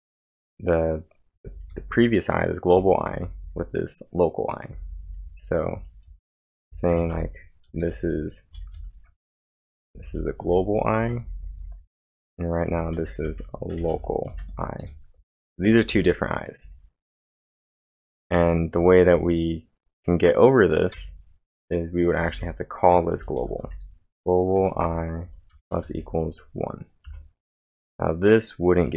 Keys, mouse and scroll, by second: 4.5-5.2 typing, 6.9-10.6 typing, 12.8-14.3 typing, 15.7-19.6 typing, 21.0 o, 22.2 g, 23.6-25.9 typing, 27.1 1.